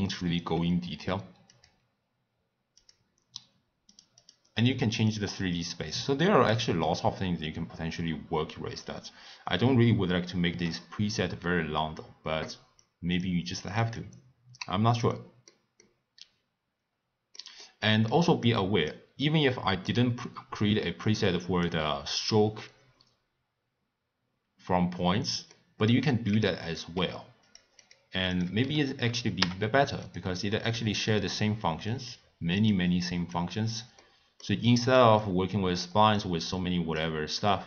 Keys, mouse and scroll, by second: 1.8 click, 3.2 click, 3.9 click, 4.2 click, 5.0 click, 6.8 click, 9.5 click, 12.8 click, 13.7 click, 13.9-15.1 drag, 15.1-18.4 middle drag, 18.4 click, 19.2-21.0 middle drag, 21.0 click, 25.5-26.3 middle drag, 26.3 click, 26.9 g, 27.8 click, 28.3 click, 29.4 u, 33.3 click, 34.0-36.1 middle drag, 36.1 click, 37.3-37.6 middle drag.